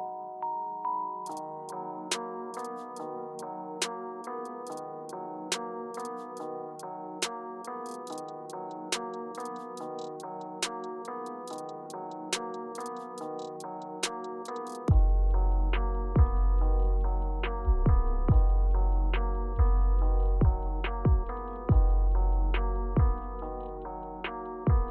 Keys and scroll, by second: 1.1 BackSpace, 2.8 super+z, 3.5 Return, 4.2 Return, 9.0 Escape, 9.9 Left, 10.1 Left, 11.6 Return, 14.4 BackSpace, 15.1 Return, 19.3 Left.